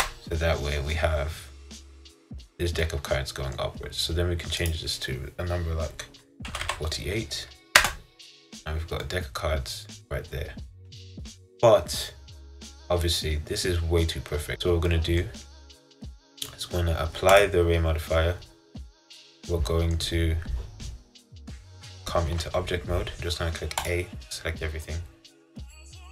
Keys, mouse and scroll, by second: 1.0-7.9 middle drag, 9.2-12.2 middle drag, 12.2-12.6 scroll down 1, 12.6-14.6 middle drag, 15.0-17.5 middle drag, 17.5-19.2 drag, 19.2-22.4 middle drag, 22.4 Tab, 24.0 a, 25.0-26.1 middle drag.